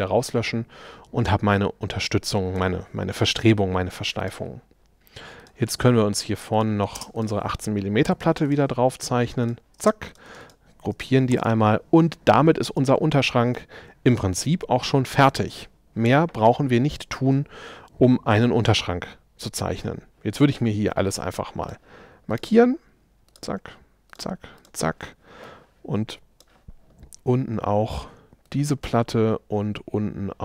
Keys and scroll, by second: 7.0 space, 8.1 p, 9.8 space.